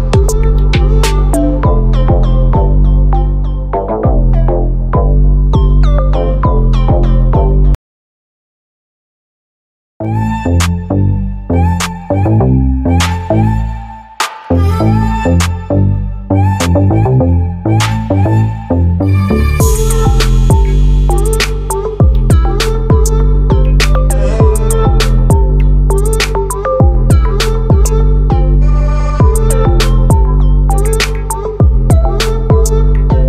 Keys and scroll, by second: 10.9 ctrl+t, 16.8 ctrl+a, 22.7 ctrl+t, 27.4 ctrl+t.